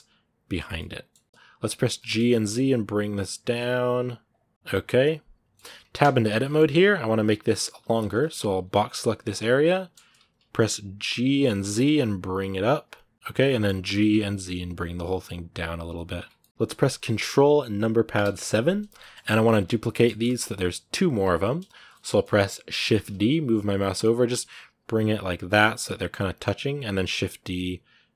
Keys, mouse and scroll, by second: 0.5 scroll down 3, 0.5 middle click, 1.2 middle click, 1.2 scroll up 5, 1.7 g, 4.4-5.5 middle drag, 5.5-5.8 scroll up 2, 5.8 Tab, 6.2 middle click, 6.9-7.6 scroll up 1, 7.6 scroll down 2, 7.9 z, 13.3 middle click, 13.7 g, 15.9 Tab, 16.0 scroll down 2, 16.2-17.9 middle drag, 17.9 ctrl+KP_7, 18.8 shift+middle click, 19.4 scroll up 1, 19.9-21.6 shift+middle drag, 21.6 scroll up 1, 21.7 shift+middle click, 22.1-22.7 scroll down 1, 22.7 shift+d, 26.8 shift+d.